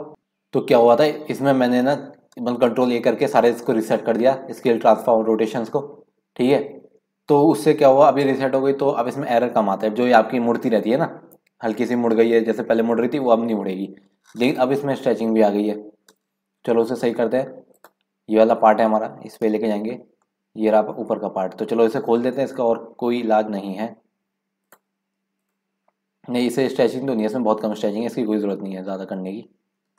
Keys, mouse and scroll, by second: 0.2-1.2 scroll up 2, 1.2-2.2 scroll up 1, 15.6-17.0 scroll up 10, 17.0 middle click, 17.4 scroll down 1, 17.7 click, 19.4 KP_Decimal, 20.3-21.3 scroll down 9, 21.5-22.2 scroll up 2, 22.2 scroll up 1, 22.2-24.7 middle drag, 24.7 click, 26.1 scroll down 5, 26.4-26.8 scroll up 1, 26.8 scroll down 4, 27.1-27.8 scroll up 3, 27.8 scroll down 1, 27.9 scroll up 1, 28.5-29.4 scroll up 3, 29.4 scroll down 3.